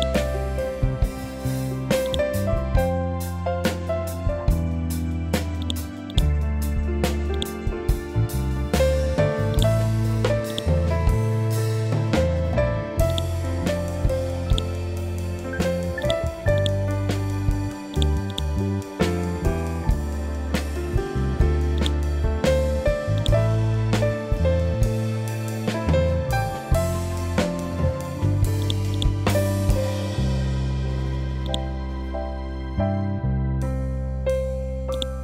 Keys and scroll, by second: 4.0 ctrl+c, 4.4 ctrl+v, 7.8 t, 8.5 l, 15.0 t, 15.5 l, 17.5 ctrl+g, 19.4 ctrl+g, 27.5 ctrl+Home, 31.7 ctrl+Home, 33.1 ctrl+End.